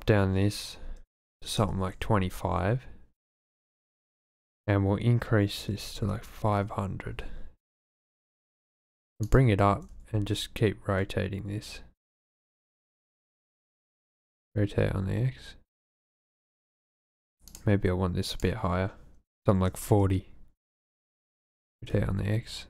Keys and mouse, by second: 4.2-6.5 drag, 6.0 KP_0, 7.9 g, 8.0 z, 9.3 click, 9.6 r, 9.8 x, 10.0 x, 13.7 shift+click, 14.2 r, 14.4 x, 17.6 click, 18.3-19.9 drag, 21.4 r, 21.6 x.